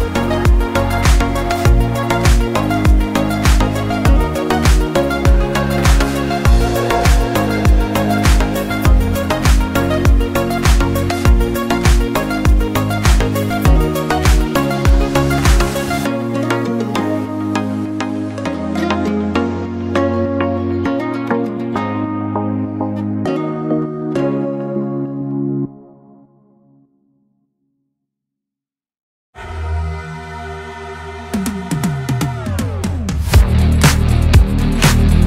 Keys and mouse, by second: 7.1 click, 7.5 click, 8.4 click, 13.1 middle click, 16.4 click, 17.6 click, 19.4-20.3 drag, 22.7 ctrl+shift+click, 23.7 middle click, 24.4 middle click, 29.8 middle click, 30.7 shift+a.